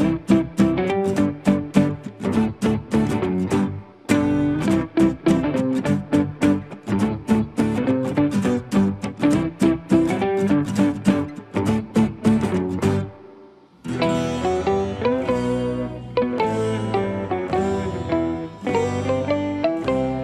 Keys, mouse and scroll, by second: 0.0 s, 0.2 scroll up 3, 0.2 middle click, 0.4 click, 0.5 shift+middle click, 0.6-0.9 scroll down 3, 0.7 middle click, 0.9 click, 1.1 ctrl+s, 1.2 shift+middle click, 1.7 middle click, 1.8 click, 1.9 Tab, 1.9 middle click, 2.4 click, 2.5 middle click, 2.8 ctrl+z, 2.8 middle click, 3.2 middle click, 3.2 click, 3.3 middle click, 3.7 click, 3.8 middle click, 4.1 click, 4.3 middle click, 4.4 e, 4.6 middle click, 4.9 middle click, 5.1 click, 5.2 middle click, 5.3 ctrl+z, 5.5 middle click, 5.6 click, 5.7 middle click, 5.8 e, 5.9 middle click, 6.0 click, 6.1 s, 6.2 middle click, 6.4 shift+middle click, 6.6 scroll down 2, 7.2 click, 7.7 middle click, 8.3 middle click, 8.4 click, 8.5 middle click, 8.8 middle click, 9.6 click, 9.8 middle click, 9.9 shift+click, 10.5 middle click, 10.7 click, 10.9 middle click, 11.0 click, 11.1 middle click, 11.2 click, 11.4 middle click, 11.5 click, 11.7 middle click, 11.8 ctrl+click, 11.9 middle click, 12.2 middle click, 12.5 alt+click, 12.6 middle click, 12.7 r, 12.9 r, 13.1 shift+middle click, 13.2 ctrl+s, 13.9 middle click, 14.0 scroll up 3, 14.1 Tab, 14.1 middle click, 14.2 click, 14.5 ctrl+z, 14.6 middle click, 14.8 click, 15.3 ctrl+click, 15.4 f, 15.5 middle click, 15.6 scroll down 1, 15.7 middle click, 16.0 middle click, 16.3 click, 16.4 middle click, 16.5 scroll down 1, 16.9 middle click, 16.9 scroll up 4, 17.1 click, 17.6 f, 17.6 click, 17.7 middle click, 17.9 scroll down 2, 18.0 shift+middle click, 18.1 click, 18.6-20.2 typing, 18.8 click, 18.9 scroll down 2, 19.8 click, 20.1 click.